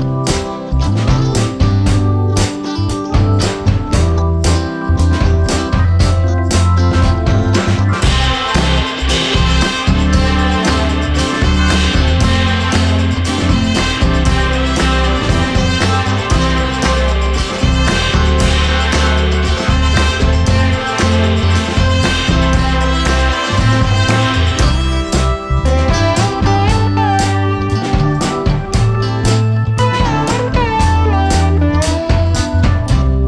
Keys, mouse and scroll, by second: 1.5 click, 1.9 click, 2.6 g, 5.1 r, 7.9-8.7 middle drag, 8.7 scroll down 1, 9.0-10.7 middle drag, 10.7 r, 13.0-13.7 scroll down 1, 13.7 KP_0, 14.1-15.0 scroll up 2, 15.0 g, 22.6 scroll down 1, 22.8-23.8 middle drag, 23.8 KP_0, 24.9-25.7 scroll up 2, 25.7 click, 26.9-27.7 scroll up 1, 27.7-29.8 drag, 30.2 click.